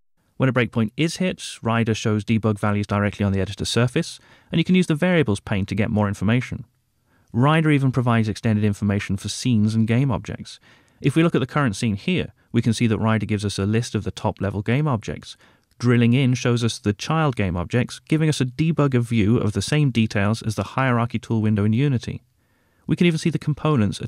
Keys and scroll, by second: 8.2 F2, 12.0 Right.